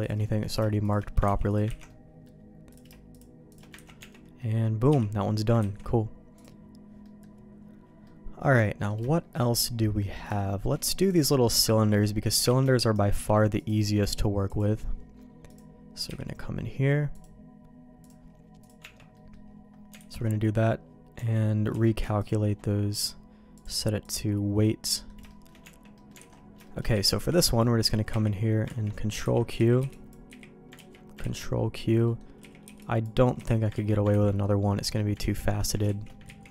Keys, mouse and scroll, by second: 0.0 shift+click, 0.2 middle click, 1.2 ctrl+x, 1.4 click, 1.7 ctrl+x, 1.8 middle click, 2.7 click, 3.1 shift+click, 3.8 ctrl+x, 3.9 Tab, 4.3 middle click, 4.9 h, 5.6 ctrl+s, 6.3 click, 7.0 middle click, 8.0 middle click, 9.1 shift+middle click, 10.3 shift+middle click, 11.0 click, 11.2 shift+middle click, 12.5 shift+d, 13.1 m, 14.4 click, 15.4 click, 16.0 h, 17.1-18.2 drag, 18.6 click, 18.8 Tab, 19.1 middle click, 20.0 alt+a, 21.1 Tab, 21.7 q, 23.5 click, 24.9 middle click, 25.2 shift+middle click, 25.6 Tab, 25.9 middle click, 26.1 alt+a, 26.6 shift+middle click, 26.9 z, 27.1 b, 28.1 z, 28.8 ctrl+q, 29.2 ctrl+x, 29.5 z, 29.7 b, 30.2 z, 30.7 ctrl+q, 31.2 ctrl+x, 32.0 middle click, 32.4 z, 32.6 b, 33.3 z, 33.7 ctrl+q, 34.1 ctrl+x, 34.4 middle click, 35.4 ctrl+z, 36.0 ctrl+shift+z.